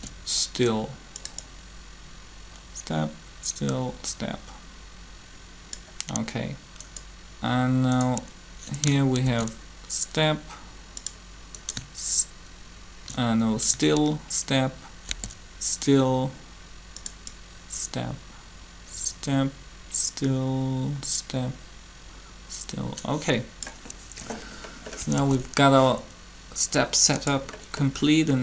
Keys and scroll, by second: 9.3 shift+d, 15.0 shift+d, 25.2 alt+a.